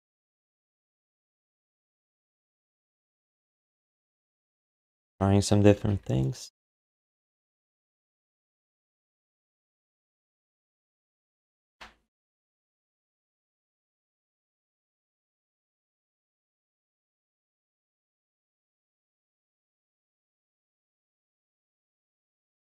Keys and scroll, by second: 0.6 q, 1.7 3, 4.1 ctrl+z, 4.3 ctrl+z, 4.5 ctrl+z, 4.7 ctrl+z, 4.9 ctrl+z, 5.1 ctrl+z, 5.5 ctrl+z, 5.9 1, 14.9 q, 15.6 alt+shift+d, 16.1 3, 17.3 1, 18.3 q, 20.7 alt+shift+d.